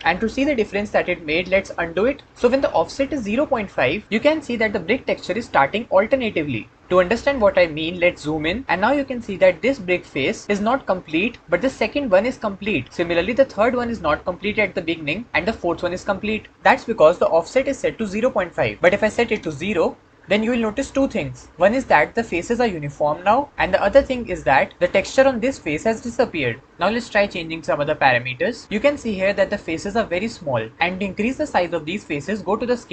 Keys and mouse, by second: 2.0 ctrl+z.